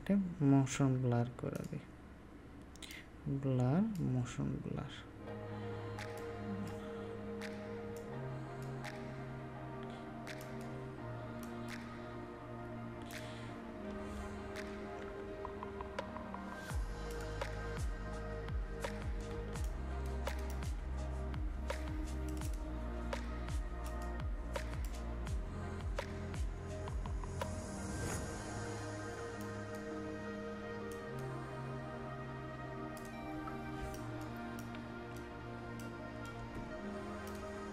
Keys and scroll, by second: 15.0 ctrl+j.